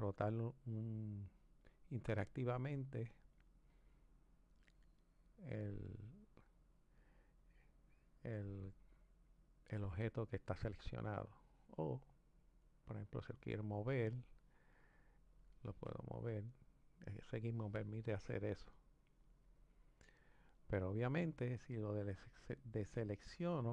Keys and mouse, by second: 1.9 click, 4.7 click, 12.6-14.2 drag, 15.3 click, 17.4 click, 19.0 click, 22.7 click.